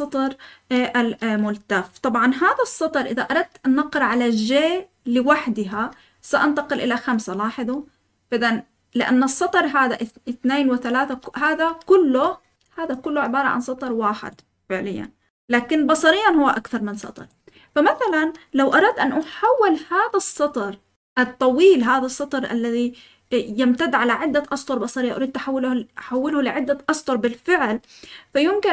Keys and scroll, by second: 5.7 j, 7.3-8.0 typing, 10.8-12.0 typing.